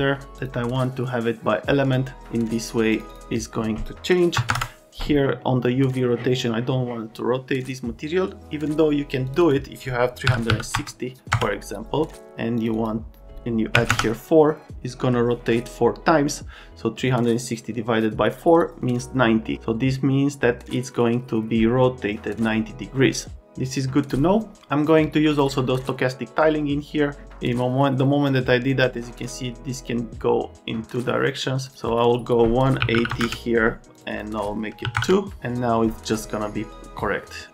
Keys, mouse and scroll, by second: 4.4 KP_0, 10.3 KP_3, 10.5 KP_6, 10.7 KP_0, 11.3 KP_Enter, 13.9 KP_Enter, 32.8 KP_1, 32.9 KP_8, 33.1 KP_0, 33.2 KP_Enter, 34.8 KP_2, 35.0 KP_Enter, 35.0 KP_5.